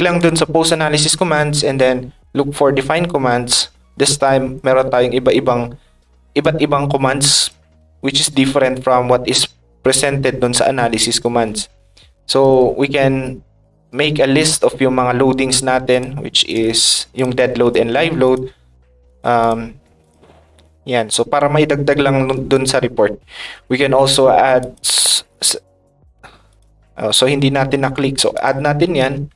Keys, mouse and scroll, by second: 0.2 click, 2.9 click, 4.0 click, 6.4 click, 15.9 click, 17.1 click, 17.6 shift+click, 18.2 click, 19.0 click, 19.4 click, 20.0 click, 22.5 click, 24.6 click, 26.4 click, 28.3 click.